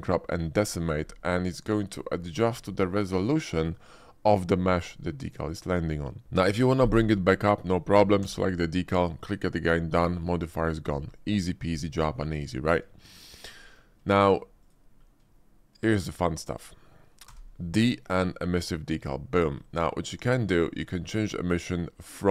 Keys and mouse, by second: 1.3 middle click, 2.2 click, 9.3 d, 13.0 shift+middle click, 13.6 middle click, 14.2 shift+click, 14.6 click, 15.3-15.9 shift+drag, 16.5 middle click, 17.3 d, 19.9 shift+middle click, 20.4 middle click, 20.9 shift+middle click.